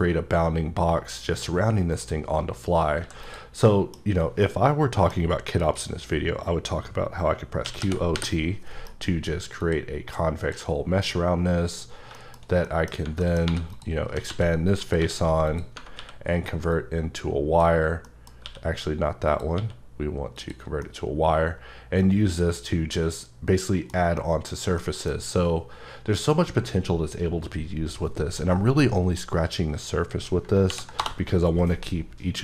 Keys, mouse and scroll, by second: 1.9 right click, 3.0 x, 3.2 click, 3.7 middle click, 4.4 middle click, 5.6 click, 7.6-8.2 typing, 8.9 F9, 9.6 click, 10.4 click, 12.1 shift+middle click, 13.2 middle click, 13.5-16.0 typing, 13.7 click, 14.8 click, 15.5 click, 16.7 click, 18.0 middle click, 19.3 click, 20.4 click, 20.8 middle click, 24.1 scroll, 24.2 double middle click, 24.8 middle click, 30.5 ctrl+Num_Lock, 30.5 ctrl+middle click, 30.7 n, 31.0 Return.